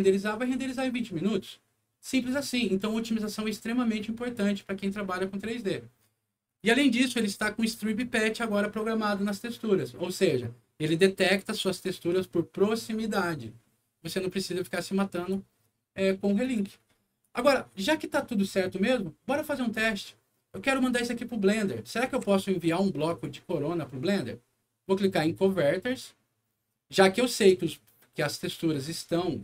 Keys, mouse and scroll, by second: 6.4 click, 7.8 click, 15.1 click, 16.4 click, 17.2 click, 22.0 w, 22.6 click, 23.0 click, 25.8 click.